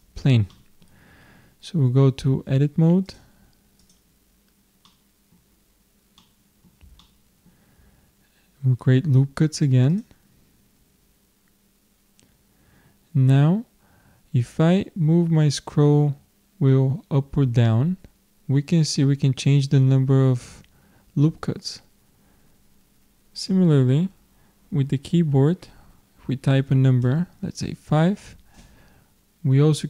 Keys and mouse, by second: 3.1-4.7 drag, 4.8-7.4 middle drag, 9.9-11.8 drag.